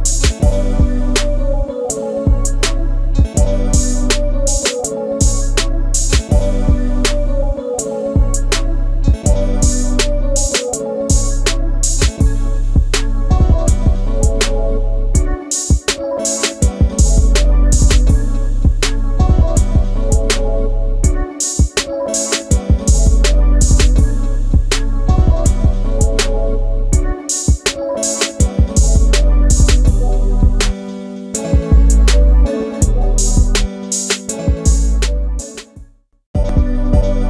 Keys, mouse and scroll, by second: 0.7 space, 2.3 m, 3.1 l, 4.8 space, 6.0 Delete, 7.0 ctrl+a, 7.6 ctrl+f, 8.7 space, 8.7 Escape, 13.7 i, 15.4 click, 15.5 shift+space, 17.0 Delete, 17.8 m, 20.0 ctrl+/, 21.7 6, 21.7 Return, 22.5 shift+middle click, 23.0 space, 24.3 Delete, 26.7 click, 28.3 f, 31.4 space, 32.1 f, 34.5 space, 36.6 f.